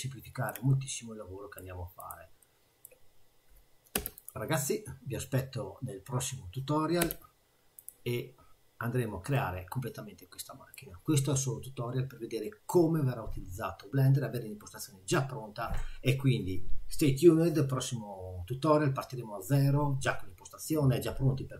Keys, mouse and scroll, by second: 0.7 middle click, 2.0 click, 2.4 middle click, 3.9 3, 4.2 click, 7.0 e, 9.3 middle click.